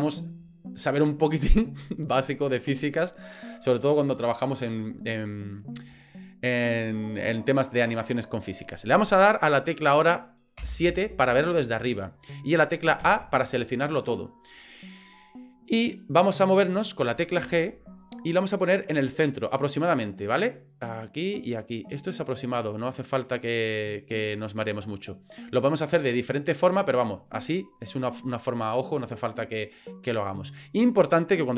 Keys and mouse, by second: 6.1-6.7 shift+middle drag, 6.9 middle click, 10.6 KP_7, 13.0 a, 17.4 g, 24.7-25.3 middle drag, 26.2-27.3 middle drag, 30.5 middle click.